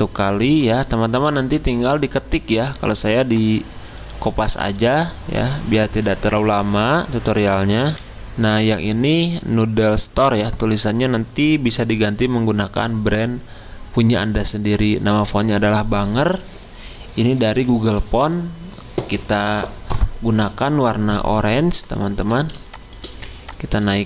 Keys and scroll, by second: 0.5 ctrl+v, 8.0 F10, 8.0 F10.